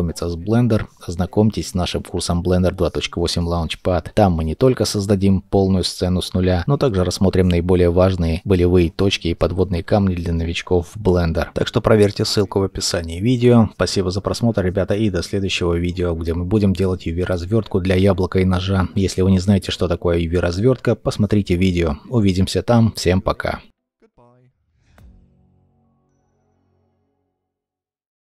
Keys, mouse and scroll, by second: 10.3 middle click.